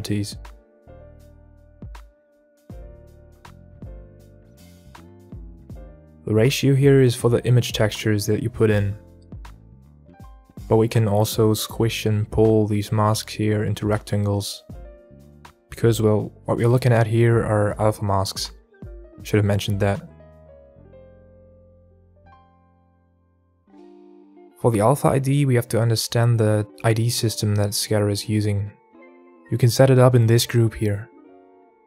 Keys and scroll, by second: 4.2 KP_0, 4.3 KP_Enter, 31.1 Tab.